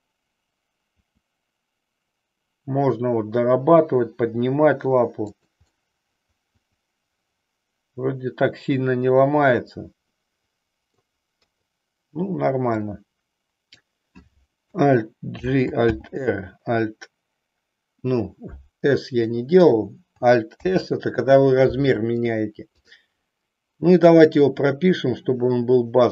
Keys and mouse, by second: 1.1 r, 5.3 click, 5.8-11.2 middle drag, 11.6 KP_3, 12.7-13.8 drag, 15.3 alt+g, 16.1 alt+r, 20.6 alt+s, 22.7 click, 24.3-26.1 drag.